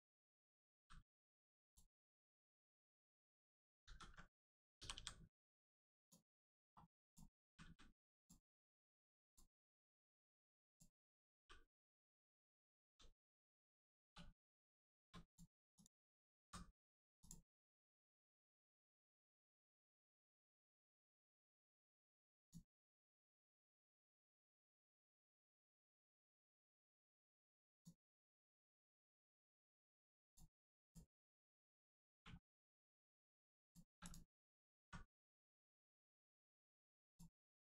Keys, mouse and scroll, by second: 0.7 g, 1.6 click, 2.6 middle click, 3.8 ctrl+z, 4.7 z, 4.9 g, 5.9 click, 6.3 middle click, 7.0 click, 7.4 g, 8.1 click, 8.4 middle click, 9.2 click, 9.5 middle click, 10.6 click, 11.1 g, 12.0 right click, 12.4 middle click, 13.1 shift+middle click, 13.5 middle click, 13.6 middle click, 14.0 2, 14.6 click, 15.2 click, 15.7 shift+click, 16.4 x, 17.1 click, 17.5 middle click, 22.3 click, 24.9 right click, 27.7 click, 30.8 click, 32.0 click, 32.1 1, 32.7 click, 37.0 click.